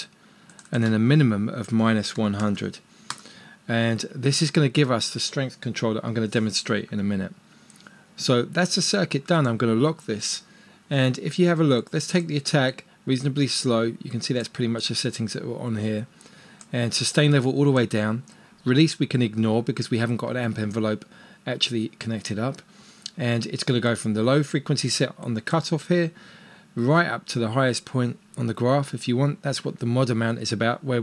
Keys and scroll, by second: 2.1-3.3 typing.